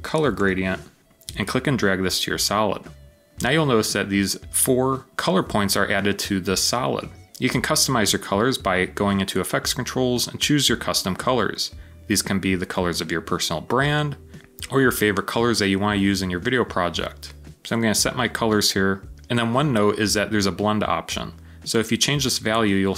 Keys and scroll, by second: 0.0-0.9 typing.